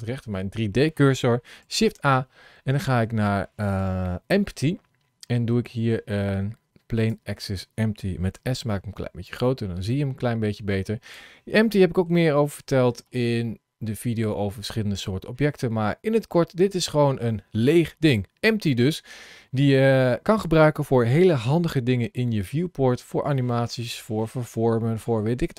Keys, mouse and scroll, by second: 1.5 shift+a, 8.3 s, 9.7 middle click, 11.1-11.4 scroll up 2, 11.6 shift+middle click, 12.1 middle click, 16.8 middle click.